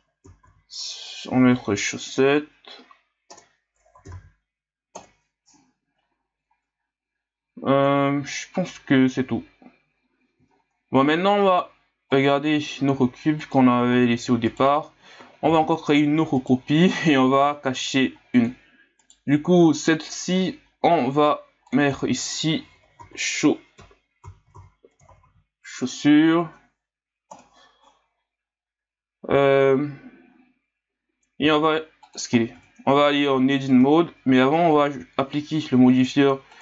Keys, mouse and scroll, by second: 10.5-12.1 scroll up 3, 12.1 click, 13.4 click, 13.9-14.5 scroll down 5, 14.5 right click, 15.5 shift+d, 18.3 click, 19.0 right click, 21.7 click, 21.8-24.4 drag, 24.4 s, 24.5 s, 31.4 s, 32.3 scroll up 1, 32.5 Tab, 33.7 Tab, 35.9-36.6 drag.